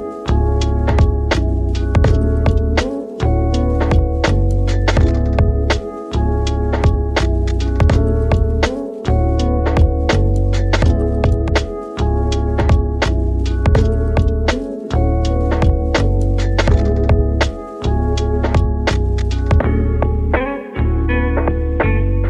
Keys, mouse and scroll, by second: 0.0-1.0 scroll down 7, 1.0-4.1 drag, 5.3-7.1 drag, 7.1-7.7 middle drag, 7.7-8.8 right drag, 8.8-10.8 middle drag, 10.8-11.9 scroll up 8, 13.1 click, 13.8-14.4 middle drag, 14.4-14.9 scroll up 2, 14.9-16.4 scroll down 12, 16.4-18.6 drag, 18.6-19.6 middle drag, 19.6 shift+a.